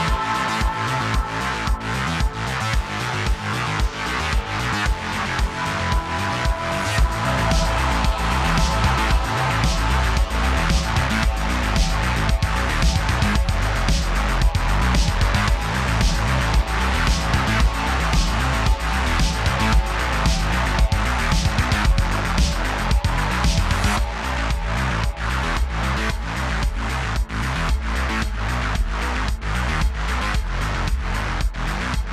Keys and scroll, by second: 6.7 q, 7.3 q, 7.8 q, 12.5-13.4 typing, 15.8-16.7 typing, 31.6 space.